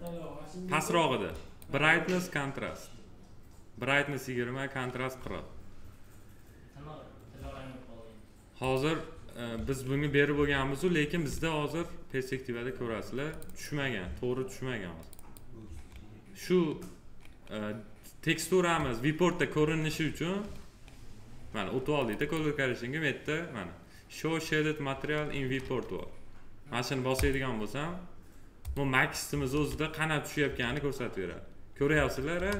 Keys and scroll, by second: 29.4 alt+w, 31.8 F4.